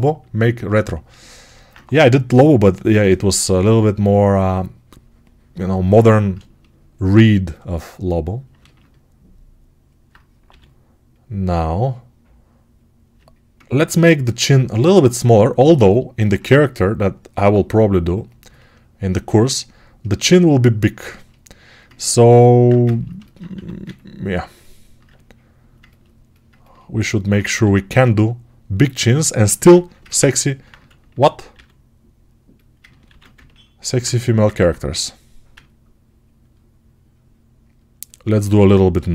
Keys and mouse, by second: 3.5 p, 5.9 1, 10.3 g, 14.2-19.9 right drag, 23.4 1, 24.9-29.2 alt+drag, 27.5 r, 29.5 ctrl+r, 31.4 r, 33.1 ctrl+r, 34.8 1.